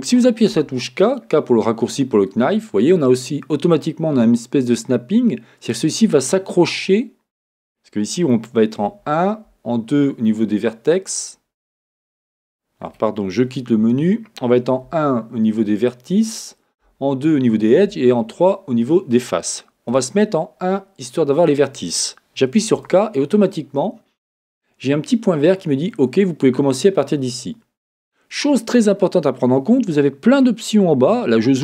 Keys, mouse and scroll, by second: 13.9 Escape, 16.8 2, 17.9 3, 19.9 1, 22.7 k.